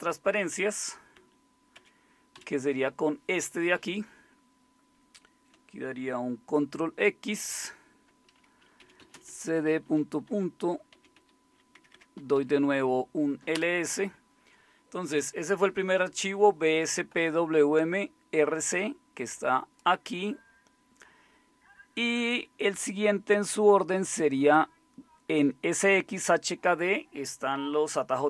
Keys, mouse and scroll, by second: 1.2 Down, 1.8 Up, 2.4 Down, 7.3 ctrl+x, 8.6-12.7 typing, 10.3 Return, 13.6 Return.